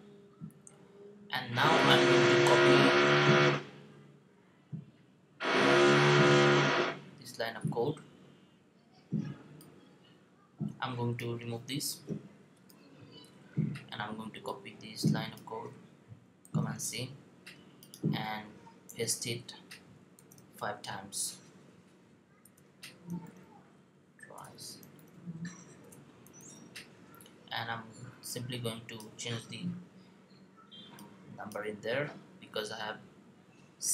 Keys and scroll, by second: 16.2 super+c, 20.0 super+v, 23.0 v, 29.7 2, 32.5 3.